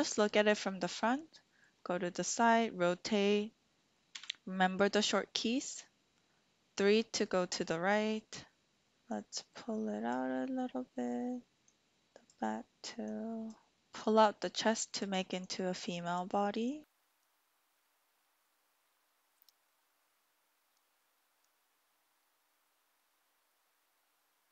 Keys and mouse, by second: 0.9 middle click, 1.9 shift+middle click, 2.7-3.9 middle drag, 4.1 KP_3, 8.9 ctrl+z, 9.1-10.1 drag, 11.6 click, 13.0 click, 13.9-15.0 drag, 15.4 click, 16.7 click, 16.9 middle click, 17.1 middle click, 17.3 click, 17.6 middle click, 17.8 click, 18.1 middle click, 18.3 click, 18.4 middle click, 18.6 click, 18.8 middle click, 19.0 middle click, 19.2 middle click, 19.5 middle click, 19.7 middle click, 20.0 middle click, 20.7 middle click, 21.3 middle click, 21.6 right click, 21.9 right click, 22.1 middle click, 22.4 click, 22.6 click, 22.7 middle click, 23.1 middle click, 23.4 click, 23.5 middle click, 23.8 click, 24.0 middle click.